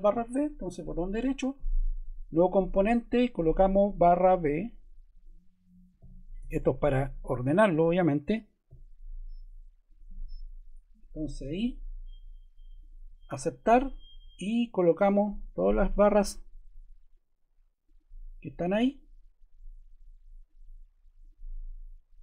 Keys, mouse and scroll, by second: 3.8 click, 5.7-7.1 typing, 8.6 b.